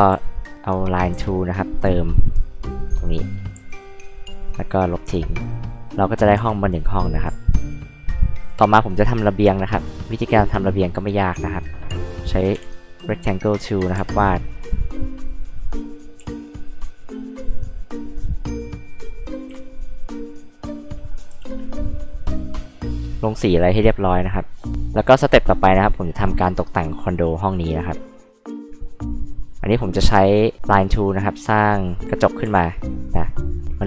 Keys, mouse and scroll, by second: 0.1 r, 1.1 l, 1.6 click, 2.0 scroll up 2, 3.1 click, 3.6 e, 4.3 click, 6.3 b, 6.7 click, 8.4 r, 9.9 click, 11.5 click, 12.5 p, 12.7-13.8 drag, 14.0 e, 14.3 click, 15.3 click, 16.2 r, 16.9 click, 18.2 click, 18.6 scroll up 2, 19.5 p, 19.9 click, 20.9 scroll up 2, 21.3 e, 21.5 click, 22.0 click, 22.5 click, 24.7 click, 25.7 click, 28.3 click, 28.9 click, 29.9 click.